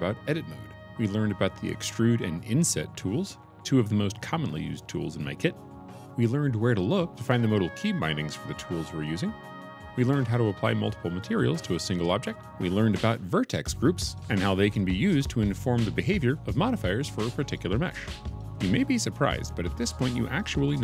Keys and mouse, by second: 20.6 Tab.